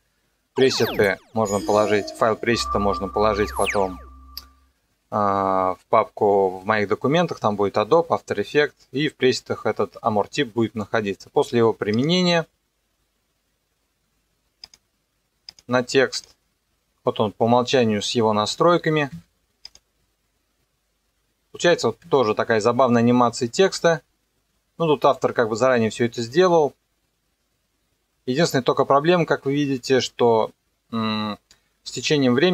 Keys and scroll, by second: 19.1 KP_0, 21.7 KP_0.